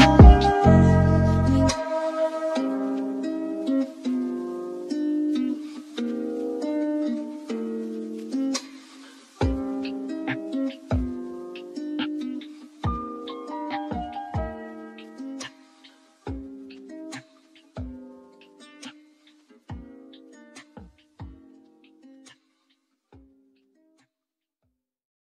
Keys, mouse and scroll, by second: 0.4 scroll down 3, 0.7-2.7 middle drag, 2.7 g, 6.2-7.4 shift+middle drag, 7.4 click, 7.9 shift+click, 8.6 shift+click, 9.7 h, 10.0 click, 10.3 h, 10.7 click, 11.3 g, 15.7-17.4 drag, 17.4 g, 18.8 click, 19.3 scroll down 7, 20.1 drag, 20.4 scroll down 7, 21.2-23.8 drag, 25.2 g.